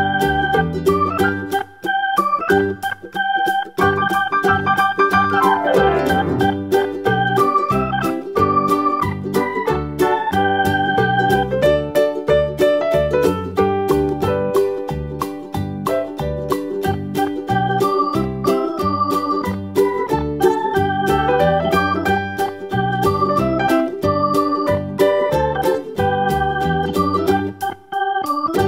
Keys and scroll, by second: 0.3 super+d, 0.6 super+d, 14.4-17.5 typing.